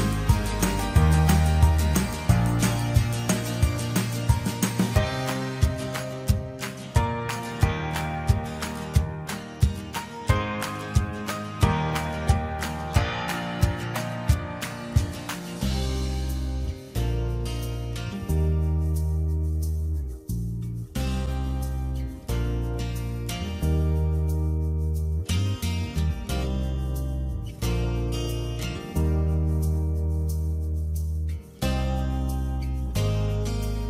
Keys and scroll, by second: 4.2 Return, 5.7 ctrl+j, 25.5 ctrl+g, 26.8 ctrl+alt+shift+e.